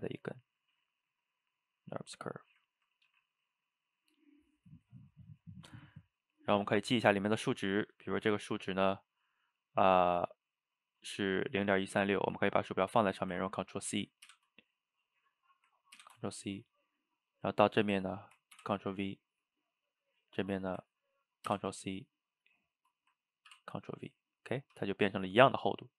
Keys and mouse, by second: 2.4-3.1 middle drag, 3.1 g, 6.5 click, 8.6-12.3 middle drag, 14.3 ctrl+c, 16.0 ctrl+c, 17.3 click, 18.6 ctrl+v, 19.9 drag, 21.5 ctrl+c, 22.5 click, 23.5 ctrl+v, 24.5-25.9 middle drag.